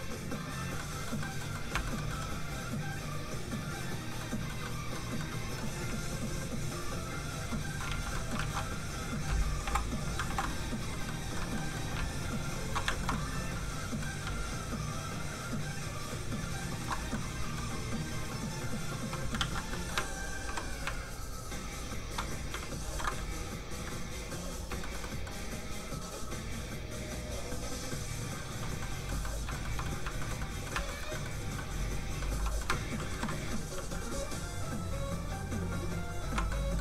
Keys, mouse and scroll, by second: 0.7 middle click, 1.7 shift+middle click, 2.1-3.6 scroll up 1, 4.2 middle click, 6.1 ctrl+shift+click, 7.7 alt+shift+click, 7.9 alt+shift+z, 8.1 middle click, 8.4 alt+shift+z, 9.6 ctrl+m, 10.2 ctrl+m, 11.0 middle click, 11.1 middle click, 11.3 scroll up 1, 11.5 middle click, 12.0 ctrl+shift+click, 12.8 shift+click, 12.9 shift+middle click, 13.1 middle click, 14.3 ctrl+shift+click, 17.1 shift+click, 17.2 middle click, 17.8 click, 19.3 ctrl+z, 19.7 middle click, 19.8 middle click, 20.4 ctrl+i, 20.9 ctrl+shift+click, 22.8 ctrl+click, 22.9 ctrl+i, 24.8 shift+middle click, 25.0 middle click, 25.1 middle click, 26.1 click, 28.8 middle click, 29.5 shift+middle click, 30.2 shift+middle click, 30.4 middle click, 30.5 middle click, 30.9 shift+middle click, 31.1 middle click, 31.2 middle click, 33.1 ctrl+i, 34.3 ctrl+click, 36.5 middle click, 36.6 middle click.